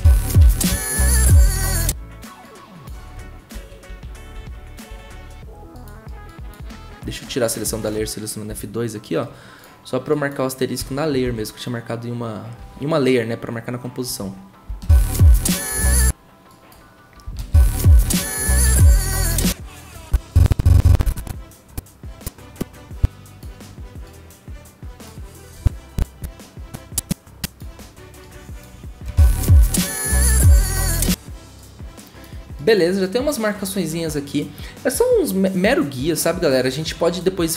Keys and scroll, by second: 0.0-1.2 typing, 3.5 ctrl+z, 3.9 ctrl+z, 4.3 ctrl+z, 8.5 F2, 10.8 *, 11.2 ctrl+z, 17.3-18.6 typing, 29.0 0.